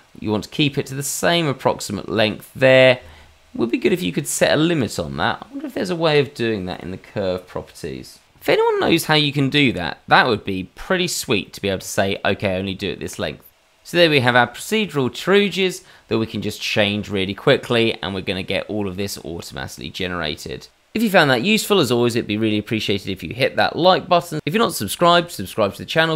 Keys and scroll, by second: 1.3 g, 2.6 g.